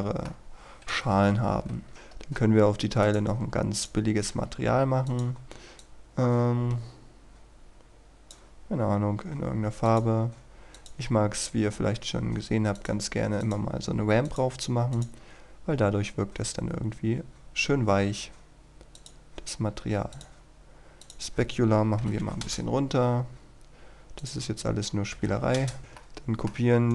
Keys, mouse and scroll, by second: 0.5-1.2 scroll down 1, 1.2 KP_1, 1.9 right click, 2.2-2.7 scroll up 1, 3.1-9.0 drag, 9.2-9.9 scroll down 1, 9.9-16.0 drag, 16.3-19.0 scroll down 1, 19.0-20.0 drag, 22.2 KP_2, 22.5 Return, 23.0-23.3 scroll up 1, 23.3-24.2 scroll down 1, 24.2 click, 25.2 KP_2, 25.3 KP_5, 25.6 Return, 25.8 right click, 26.0 shift+middle click.